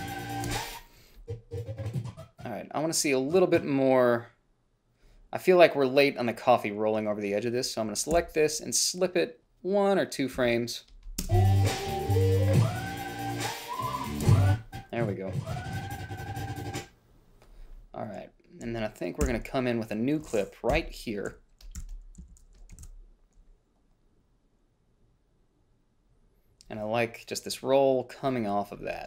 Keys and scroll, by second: 0.8 space, 8.5 s, 10.7 a, 11.5 space, 14.5 space, 19.5 g, 21.0 Delete, 23.1 ctrl+b.